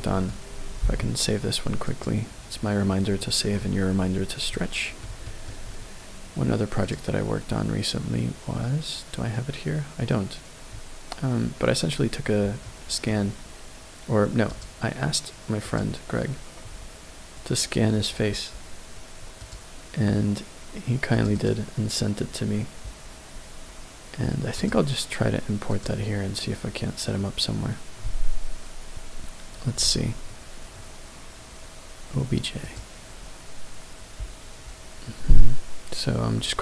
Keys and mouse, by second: 0.8 ctrl+s, 4.5 middle click, 5.2 shift+middle click, 6.9-11.6 drag, 12.6 middle click, 14.5-15.9 drag, 25.7-32.9 drag.